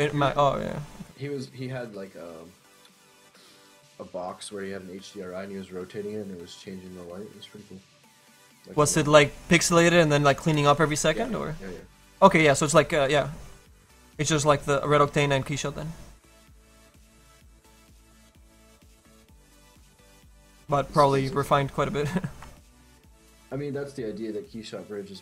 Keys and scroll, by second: 0.1 ctrl+z.